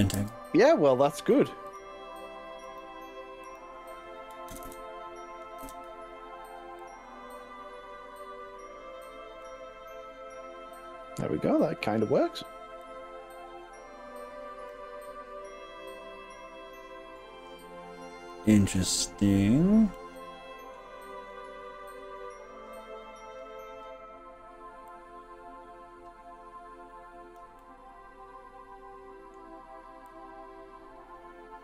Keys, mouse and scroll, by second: 0.2 ctrl+r, 2.7 right click, 3.5 click, 4.5 ctrl+KP_Add, 4.7 ctrl+KP_Add, 5.7 ctrl+KP_Add, 6.9 click, 9.3 scroll up 1, 9.4-12.3 middle drag, 12.9 click, 15.1-17.5 middle drag, 17.7-18.3 scroll down 2, 18.3 middle click, 19.1 scroll up 3, 20.1-20.9 middle drag, 24.9 drag, 27.7-29.5 middle drag, 30.1 click.